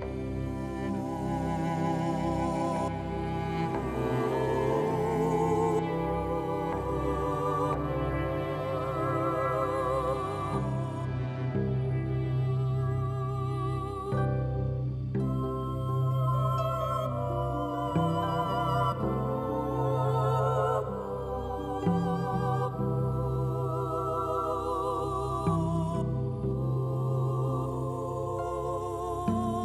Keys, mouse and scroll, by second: 1.6 click, 2.4 shift+click, 3.6 click, 5.7 e, 6.8 click, 7.4 middle click, 7.5-10.9 drag, 8.8 g, 11.4 right click, 11.8 g, 18.7-26.2 drag, 21.5 a, 22.1 space, 23.5 space, 26.2 middle click, 26.6-29.6 drag.